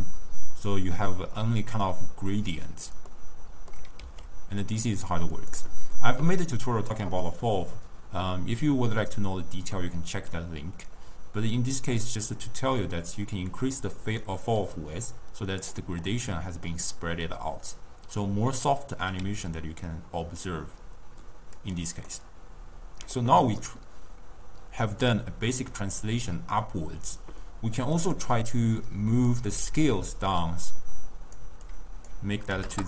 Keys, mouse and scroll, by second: 1.7 d, 2.2 d, 3.2-4.1 middle drag, 4.1 s, 11.6-14.7 drag, 16.2-19.3 middle drag, 22.1-23.7 middle drag, 23.7 scroll up 1, 23.8-26.8 middle drag, 28.4 click, 28.4-29.4 scroll up 1, 29.4-32.8 drag.